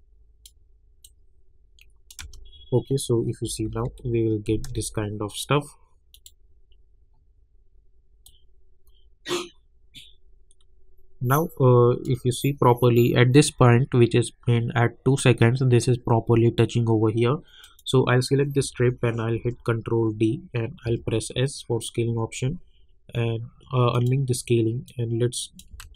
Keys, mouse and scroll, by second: 2.2 space, 3.4 -, 3.6 -, 3.8 -, 4.7 space, 6.1-14.5 drag, 17.6 click, 19.3 ctrl+d, 20.8 s, 23.9 click, 25.8 ctrl+z.